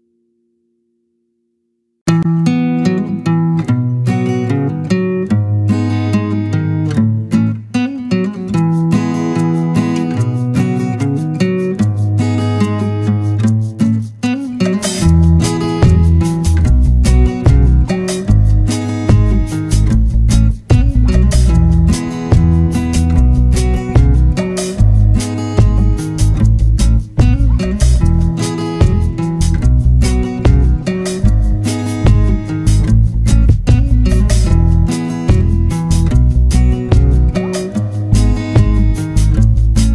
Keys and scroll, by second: 20.8 ctrl+-, 37.5 ctrl+z.